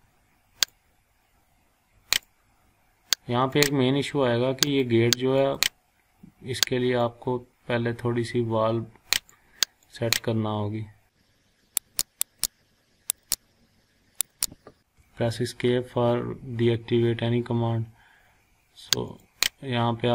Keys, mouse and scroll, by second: 0.7-2.2 drag, 2.6 scroll down 1, 3.5-9.5 drag, 12.0 click, 14.2 click, 15.0 Escape, 19.1 click.